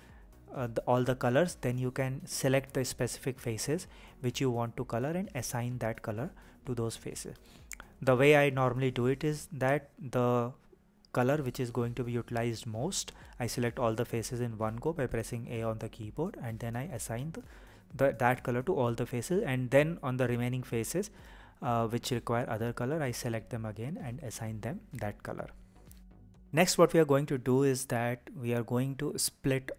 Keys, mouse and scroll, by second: 0.3 click, 0.9 click, 1.9 click, 5.1-5.7 scroll up 2, 5.7 click, 6.1 shift+click, 6.7 shift+click, 7.8 click, 8.5 click, 9.7 click, 10.1 shift+click, 10.5 shift+click, 10.9 shift+click, 11.7 click, 12.4 click, 13.2 click, 13.6 shift+click, 14.0 shift+click, 14.8 click, 15.4 click, 16.2 click, 16.6 scroll up 2, 16.9-17.9 scroll down 2, 17.9 click, 22.1-23.3 scroll up 3, 23.3-24.1 scroll down 3, 24.1-24.5 scroll down 1, 24.5-25.5 scroll up 3, 25.5-28.4 scroll down 3, 28.4 click, 29.7 scroll down 1.